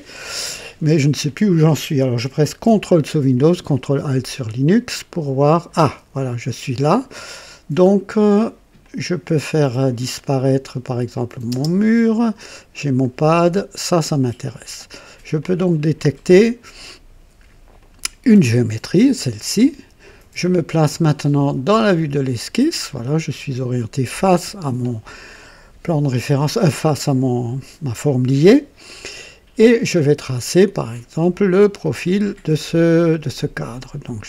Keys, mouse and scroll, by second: 4.3-5.8 ctrl+alt+drag, 8.8 click, 11.1 click, 11.5 space, 13.2-13.6 scroll up 2, 13.7 right click, 15.4 click, 17.7 click, 21.9 click, 22.9-23.2 scroll up 2, 23.5 right click, 28.6 scroll up 2, 30.3 click, 30.9 scroll up 1, 31.3 right click, 33.5 click.